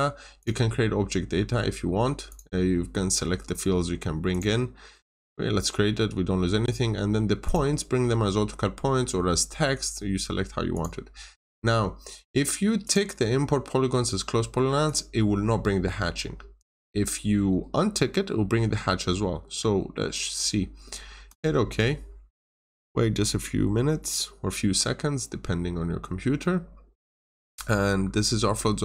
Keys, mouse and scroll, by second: 26.7 scroll down 1, 27.2 middle click, 27.6-28.0 scroll down 1, 28.4-28.8 scroll up 1.